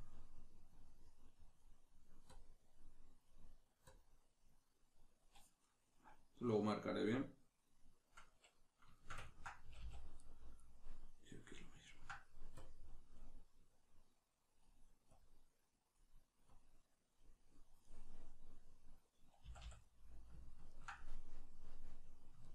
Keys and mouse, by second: 0.7-5.7 drag, 5.7-10.2 middle drag, 9.6 a, 10.2 right click, 11.8 ctrl+middle click, 12.6-17.9 drag, 17.9-22.5 middle drag, 19.5 a.